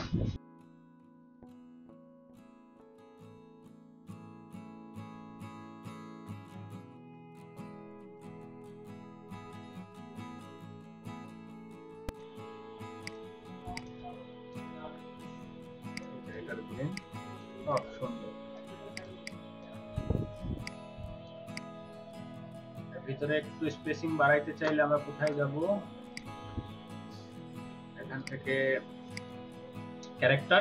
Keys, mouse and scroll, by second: 0.6 scroll down 3, 2.9-3.5 scroll down 3, 3.6-4.2 scroll down 10, 4.5-5.1 scroll down 9, 8.2 double click, 9.8 double click, 14.5 typing, 18.9 ctrl+click, 19.7 space.